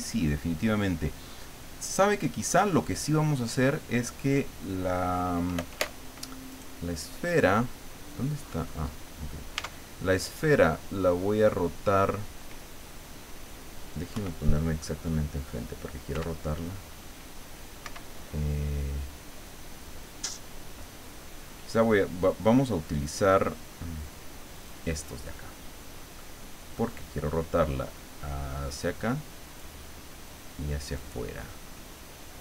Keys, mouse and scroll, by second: 6.5 right click, 7.3-7.9 scroll down 2, 8.4-9.1 scroll up 2, 9.6 Tab, 14.1 KP_1, 16.1 r, 17.8 Escape, 24.6 click, 25.3-26.4 middle drag, 27.9-29.8 drag, 31.0-32.4 drag.